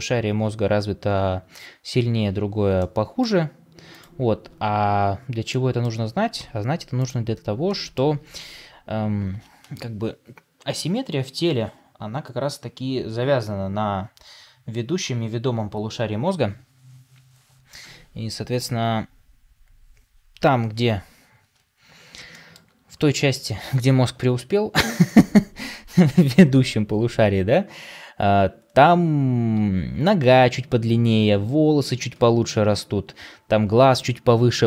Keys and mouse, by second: 2.7-3.2 middle drag, 5.4 middle click, 6.3 Tab, 7.6 middle click, 22.2 shift+middle click, 23.5 KP_3, 24.7 KP_1.